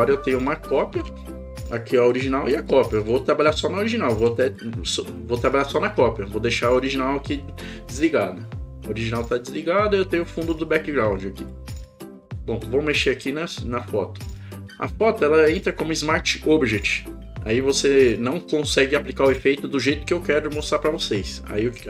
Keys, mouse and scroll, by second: 2.2 click, 10.4 click, 11.5 click.